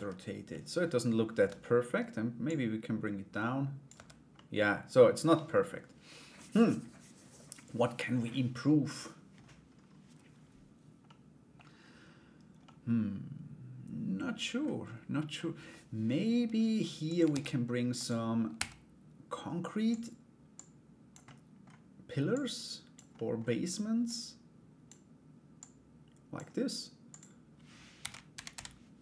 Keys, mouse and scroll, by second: 0.1 middle click, 2.0 Tab, 2.0-3.4 drag, 3.9 middle click, 10.6 middle click, 12.2-14.2 middle drag, 16.9 shift+a, 18.1 s, 20.1 click, 20.8 middle click, 21.9 click, 22.7 middle click, 23.6 click, 25.1-29.0 drag.